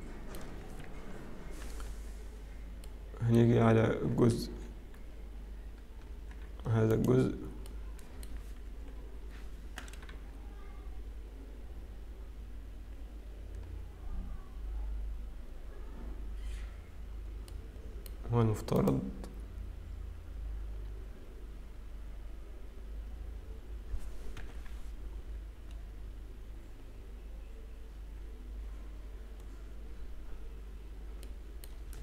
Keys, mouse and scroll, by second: 0.7 click, 0.7 middle click, 1.1 KP_7, 1.4-2.5 scroll up 3, 2.5 Tab, 2.5-2.9 scroll down 2, 2.9 middle click, 4.8 Escape, 4.8 z, 6.2 Tab, 6.9 click, 7.7 middle click, 8.7 KP_7, 10.0-10.8 scroll down 2, 13.2 scroll up 1, 15.5-17.5 scroll up 1, 17.5 middle click, 19.0 click, 24.4 KP_7, 29.5-32.0 scroll down 1.